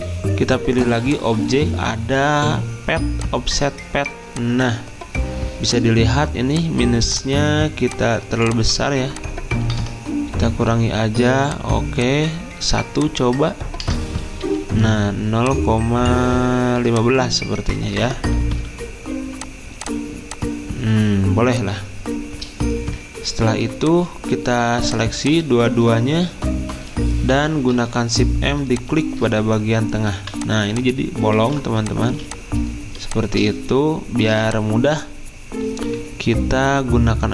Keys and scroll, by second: 9.8 BackSpace, 10.6 2, 13.8 BackSpace, 18.0 BackSpace, 31.4 ctrl+z, 32.1 z, 34.3 v.